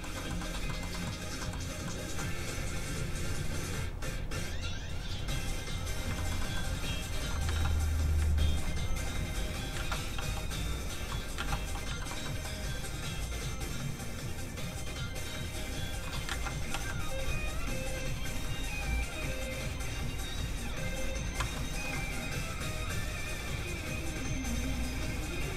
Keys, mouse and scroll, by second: 1.3 scroll down 1, 1.4 middle click, 1.6 scroll up 1, 1.8 middle click, 2.4-3.2 scroll down 1, 4.6 click, 6.1 shift+middle click, 6.4 middle click, 6.5 middle click, 7.5 ctrl+z, 8.8 click, 9.7 ctrl+z, 10.2 f, 11.3 ctrl+z, 11.3 click, 11.6 f, 11.7 click, 12.0 shift+middle click, 12.2 middle click, 13.4 click, 16.2 ctrl+z, 16.7 z, 16.8 click, 21.5 shift+middle click, 24.5 middle click, 24.6 click.